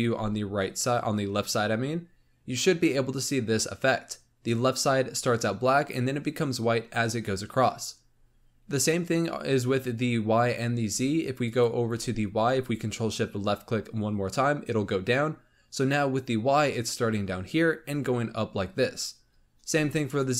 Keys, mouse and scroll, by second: 8.0 scroll up 3, 8.9-11.4 scroll up 1, 11.4 ctrl+shift+click, 20.1 ctrl+shift+click.